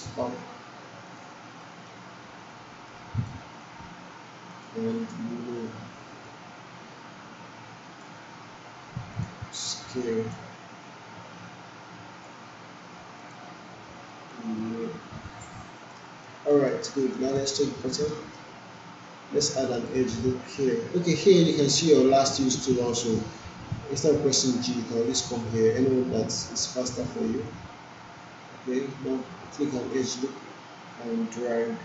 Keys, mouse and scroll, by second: 1.1 alt+click, 1.6 alt+right click, 2.5-3.5 drag, 16.3 alt+right click, 16.7 alt+middle click, 19.7 click, 27.4-31.8 drag.